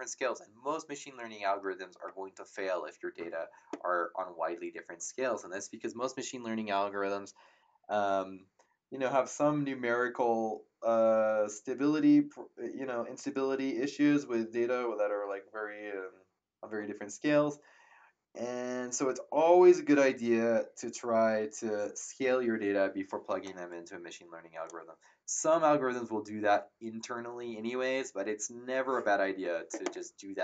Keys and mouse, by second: 23.4 click.